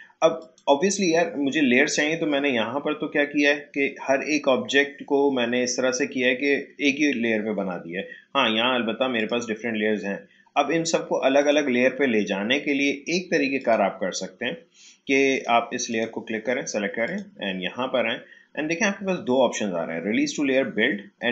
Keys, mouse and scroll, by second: 0.4 click, 9.1 click.